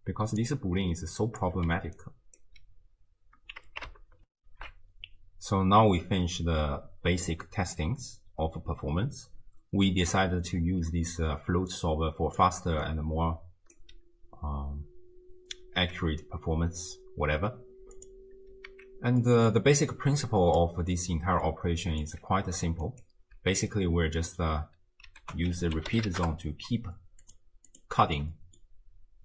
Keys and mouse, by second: 0.4 click, 1.7 d, 2.0 click, 2.4 d, 2.6 d, 4.4 ctrl+alt+shift+w, 4.6 ctrl+alt+shift+q, 11.5-12.8 d, 11.7 click, 13.8 d, 13.9 d, 18.0 click, 18.7 ctrl+x, 19.2 middle click, 20.0-20.7 drag, 21.2 middle drag, 22.0 click, 22.9 ctrl+alt+click, 23.8-24.5 middle drag, 25.2 ctrl+a, 27.7 click, 28.3 middle drag.